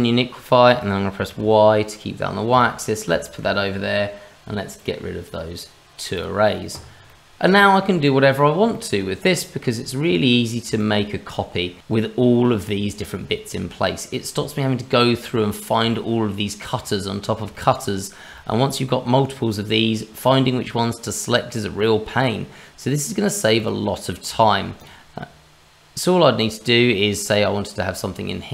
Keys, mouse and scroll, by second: 3.2 shift+middle click, 4.8 click, 5.2 click, 6.7-7.4 scroll up 3, 7.1 middle click, 7.6 shift+middle click, 8.0 middle click, 8.9 shift+middle click, 9.7-10.2 scroll down 2, 10.2-10.8 scroll up 4, 10.8 shift+middle click, 13.6-15.1 scroll down 2, 15.8 scroll down 2, 15.9 shift+middle click, 17.5 shift+middle click, 17.9-18.2 scroll up 2, 21.0 middle click, 23.6 click, 24.4 shift+middle click, 24.8 click, 25.3 scroll up 1, 26.6 middle click, 27.2 click.